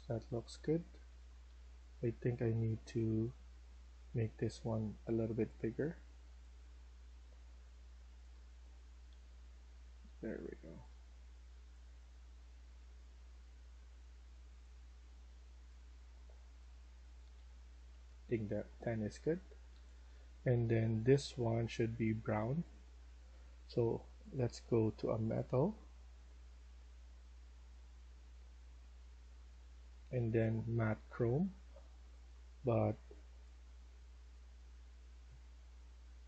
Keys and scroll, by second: 0.0-5.0 typing, 7.9-9.0 typing, 10.0-10.7 typing, 16.9-21.9 typing.